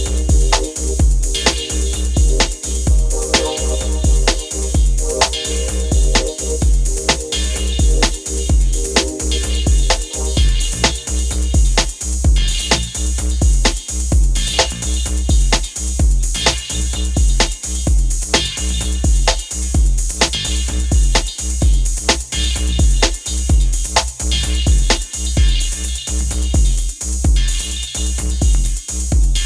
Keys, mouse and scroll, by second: 0.8-1.5 click, 1.5 ctrl+z, 3.6 click, 6.9 ctrl+t, 8.0-8.8 click, 8.6 ctrl+z, 9.2-11.4 drag, 14.3 alt+scroll down 1, 15.1-16.3 drag, 27.0-29.4 drag.